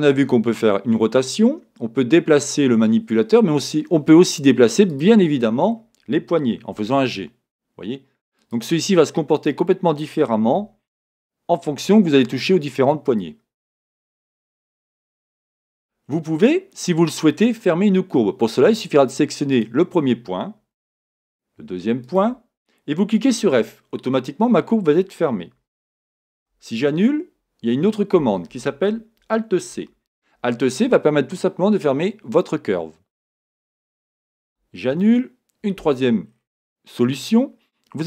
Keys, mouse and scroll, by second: 4.9 click, 6.8 g, 8.5 click, 9.4 click, 10.5 g, 13.1 click, 16.3-16.8 scroll down 1, 16.8-19.5 scroll up 1, 19.5 click, 23.4 f, 26.3 z, 29.7 alt+c, 34.8 z, 36.3 scroll down 1.